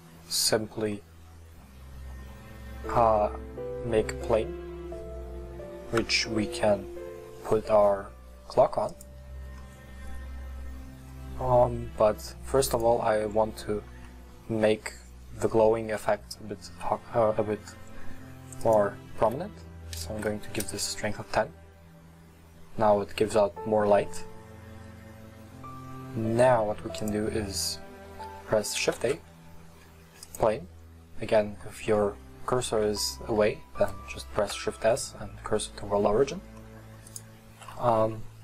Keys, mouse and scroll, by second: 6.1 scroll down 4, 8.9 click, 12.7-21.6 drag, 27.0 click, 27.6-29.2 middle drag, 30.3 shift+a, 31.7-33.3 middle drag, 33.3-33.9 scroll down 1, 33.9-37.6 scroll down 1, 37.7 middle click.